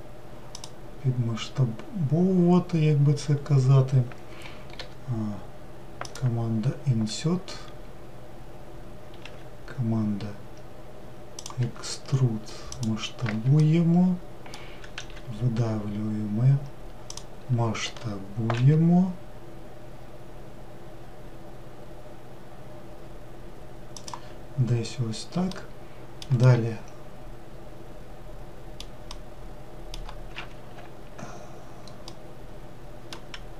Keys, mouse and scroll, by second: 13.6-15.0 shift+middle drag, 15.0 e, 25.0-25.5 scroll down 1, 25.6-30.5 middle drag, 30.5 ctrl+z, 32.2-33.5 middle drag.